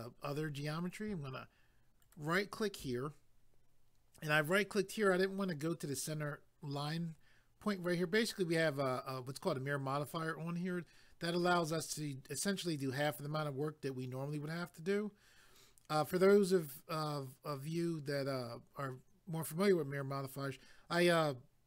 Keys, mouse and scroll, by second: 2.0 ctrl+right click.